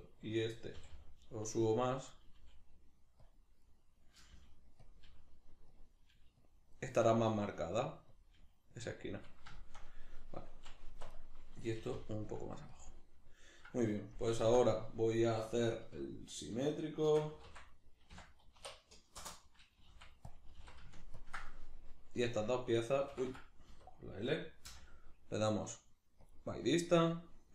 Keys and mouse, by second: 0.7 g, 2.1 click, 2.3 g, 3.3 click, 3.6 right click, 4.1 g, 4.9 click, 5.1 g, 5.9 click, 6.1 g, 6.5 click, 6.7 right click, 7.0 g, 8.3 click, 8.3 g, 8.8 click, 9.6-11.1 shift+middle drag, 10.9 1, 11.1 right click, 11.8 g, 12.8 click, 14.5 l, 17.1 shift+d, 19.3 Return, 20.3 click, 20.5 g, 21.2 ctrl+click, 23.2 Escape.